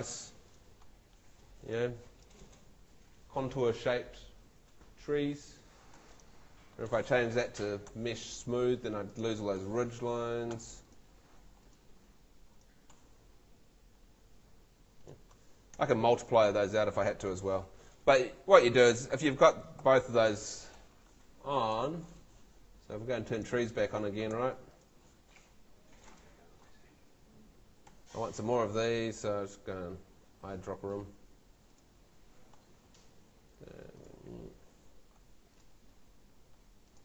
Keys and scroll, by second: 15.7 Home, 19.8 super+l, 27.9 Escape.